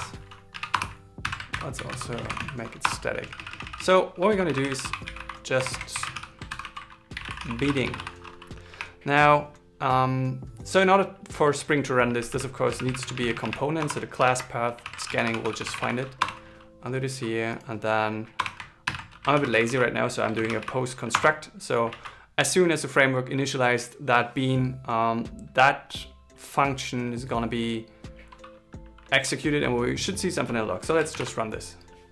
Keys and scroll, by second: 1.6 alt+l, 1.8 shift+j, 3.5 shift+s, 6.6-7.5 typing, 14.5 alt+l, 15.2 shift+c, 19.2 alt+l, 19.7 shift+p, 20.7 shift+c, 22.2 super+s, 31.4 ctrl+shift+r.